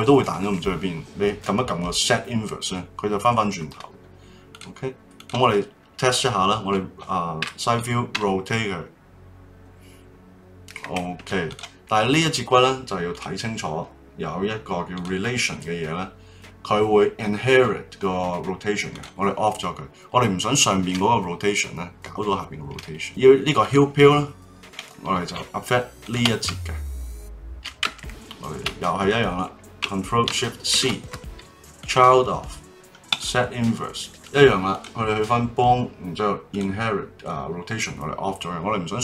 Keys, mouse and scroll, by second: 4.5 click, 5.1 click, 7.4 KP_3, 8.1 r, 11.5 click, 12.1 click, 13.1 click, 14.9 click, 18.9 click, 23.0 middle click, 23.6 click, 26.0 shift+click, 30.7 ctrl+shift+c, 33.1 click, 34.7 click, 36.5 click.